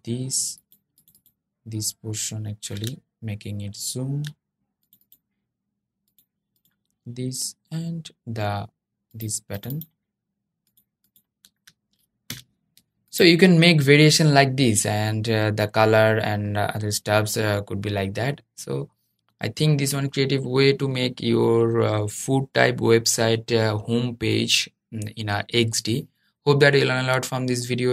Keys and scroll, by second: 12.0 super+0.